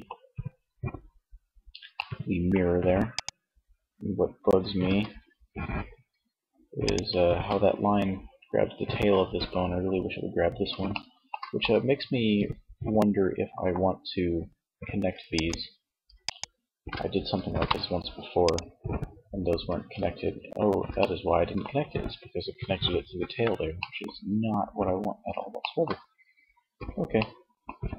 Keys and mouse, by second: 0.9-2.0 middle drag, 2.2-3.9 right drag, 3.9 r, 6.1 click, 6.2 ctrl+z, 10.2 middle click, 11.8 middle click, 12.5-14.5 middle drag, 16.4 ctrl+p, 18.8 ctrl+z, 22.9-25.6 middle drag, 26.4-27.9 middle drag.